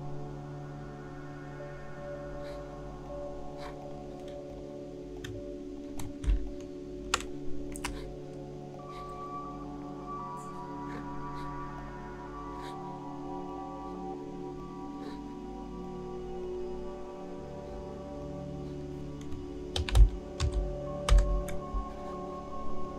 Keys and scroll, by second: 6.3 shift+space, 19.6-21.1 typing.